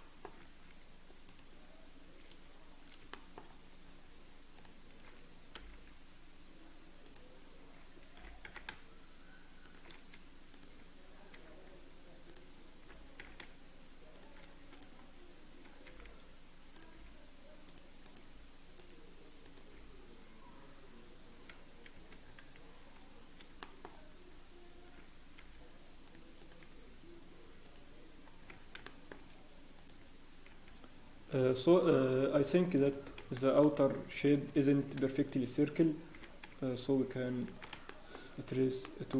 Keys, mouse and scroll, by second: 1.2 alt+click, 1.2-1.6 scroll up 1, 3.1 shift+middle click, 3.4 scroll up 1, 4.5 click, 5.5 g, 8.4 g, 10.5 click, 11.3 g, 13.4 shift+g, 14.7 click, 16.1 g, 17.0 g, 18.0 click, 18.2 g, 19.4 click, 19.7 g, 22.2 scroll down 1, 23.6 shift+middle click, 23.9-24.7 scroll down 4, 25.4 g, 26.4 click, 26.4 scroll up 5, 26.6 g, 28.4-28.7 scroll down 1, 28.8 shift+middle click, 29.1-29.7 scroll down 3, 29.7 click, 30.5-31.9 scroll up 2, 30.5 g, 32.1 click, 32.4 g, 33.0 scroll down 1, 33.3 shift+middle click, 33.7-34.2 scroll down 3, 34.2 click, 35.2 shift+click, 35.2 scroll up 2, 36.1 g, 37.8 shift+middle click, 38.2 scroll up 1, 38.8 shift+middle click.